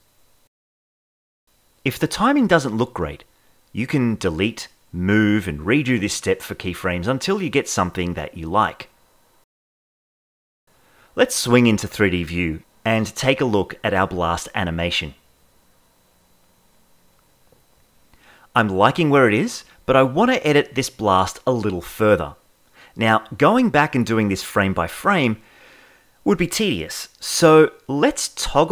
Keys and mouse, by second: 0.7 ctrl+z, 0.9 ctrl+z, 1.1 ctrl+z, 1.4 ctrl+z, 1.9 click, 2.2 click, 3.8 click, 4.5 click, 6.4-7.1 drag, 7.7 click, 7.9 ctrl+shift+e, 8.4-9.1 drag, 9.7 ctrl+Tab, 12.0-13.0 shift+middle drag, 13.2 shift+KP_5, 14.1-14.7 drag, 15.4 click, 16.1 space, 18.3-19.0 shift+middle drag, 19.3-19.9 middle drag, 20.3-20.8 middle drag, 21.0-21.5 shift+middle drag, 25.7 space, 28.2 ctrl+Tab.